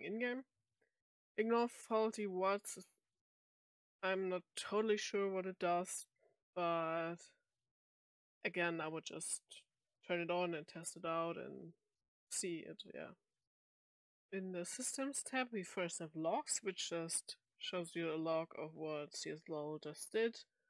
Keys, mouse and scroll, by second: 13.7 click, 16.2 click, 17.8-18.4 drag, 19.5 click, 20.4 click.